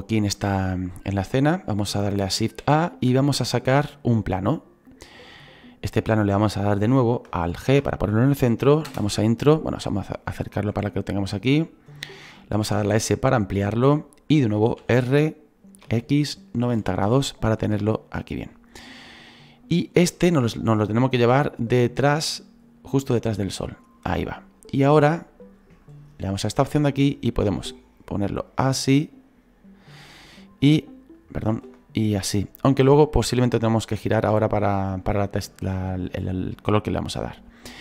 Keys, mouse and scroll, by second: 0.4-2.6 middle drag, 4.6 shift+a, 7.6 alt+g, 35.7-37.8 drag.